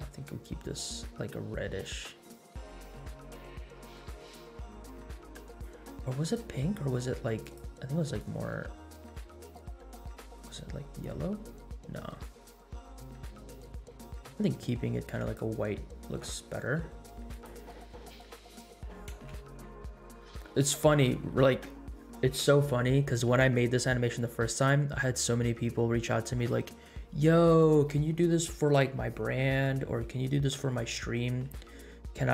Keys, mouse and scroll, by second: 6.2 click, 7.4 click, 17.3 click, 19.2 space.